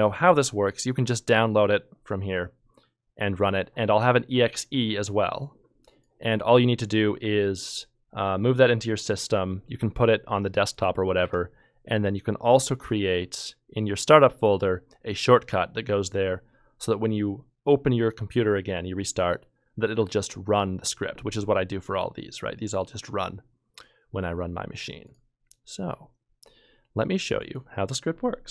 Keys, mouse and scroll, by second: 10.7 ctrl+Tab, 12.6-13.3 typing.